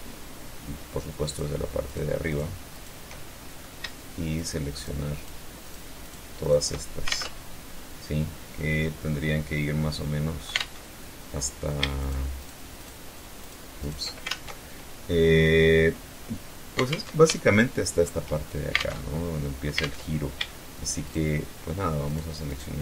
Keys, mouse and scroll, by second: 0.5 shift+right click, 1.1 shift+right click, 1.5 shift+right click, 2.0 shift+right click, 2.4 shift+middle click, 3.6 shift+right click, 4.0 shift+right click, 4.4 shift+right click, 4.9 shift+right click, 5.2 shift+right click, 5.7 shift+right click, 6.3 alt+shift+Tab, 9.8 alt+Tab, 11.2 shift+right click, 11.7 shift+right click, 12.0 shift+right click, 12.7 shift+right click, 13.0 shift+right click, 13.5 alt+shift+Tab, 16.1 alt+Tab, 16.6 alt+shift+click, 18.0 alt+Tab, 19.0 alt+Tab, 20.3 shift+right click, 21.3 shift+right click, 21.7 shift+right click, 22.7 shift+right click.